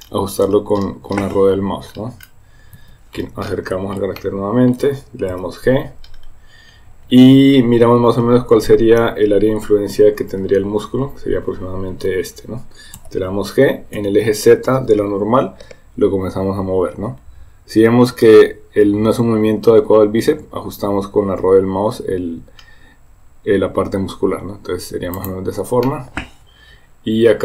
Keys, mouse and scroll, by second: 4.2 middle click, 5.4 g, 8.3 s, 13.0 g, 25.9-27.4 middle drag.